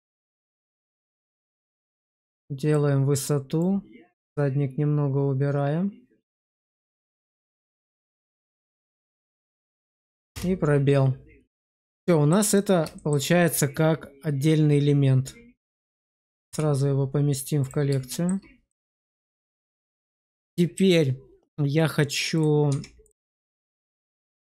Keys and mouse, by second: 1.0 click, 3.6 click, 10.2 space, 11.6-12.2 middle drag, 12.9 shift+middle click, 16.4 m, 18.0 shift+middle drag, 18.6 middle click, 19.3 shift+middle drag, 20.3 shift+middle click, 22.6 Tab, 22.9 click, 24.1 middle click.